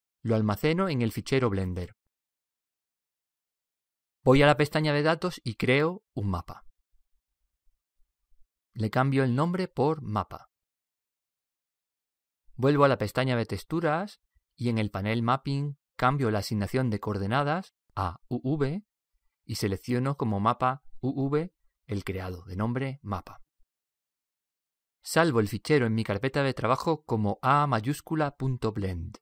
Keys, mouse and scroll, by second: 2.3 click, 5.6-10.5 drag, 13.4-16.3 drag, 16.5 click, 18.4 click, 28.3 click.